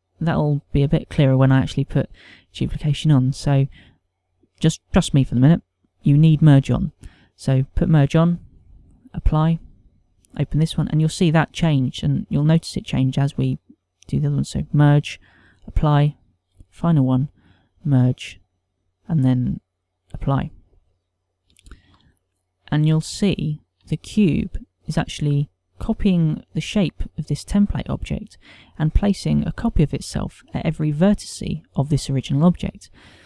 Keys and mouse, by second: 9.7 click, 10.8 click, 15.0 click, 16.2 click, 17.3 click, 18.5 click, 20.8 click, 23.2 ctrl+middle click, 24.2 shift+middle click.